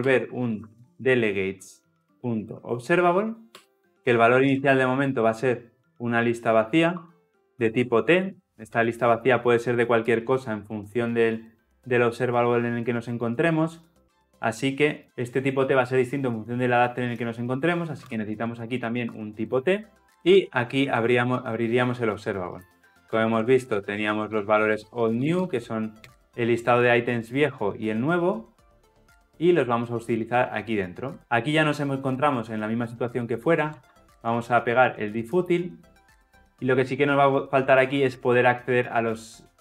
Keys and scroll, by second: 2.1 Return, 6.9 Return, 21.3 ctrl+alt+l, 21.3 ctrl+alt+o, 33.8 ctrl+v.